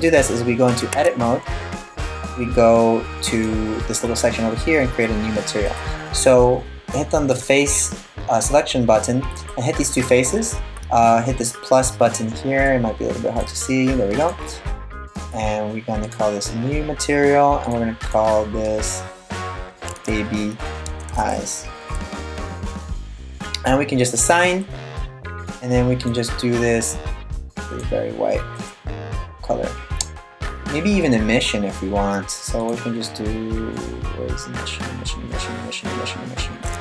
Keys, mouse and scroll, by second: 0.6 Tab, 2.9 click, 5.3 right click, 7.0 click, 9.0 right click, 9.9 shift+right click, 13.8 click, 15.6 click, 17.7 click, 23.7 click, 25.6 click, 32.2 click.